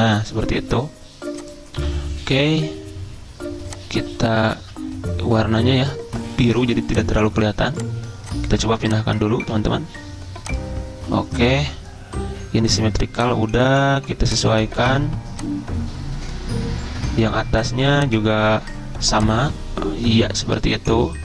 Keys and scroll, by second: 4.6 ctrl+z.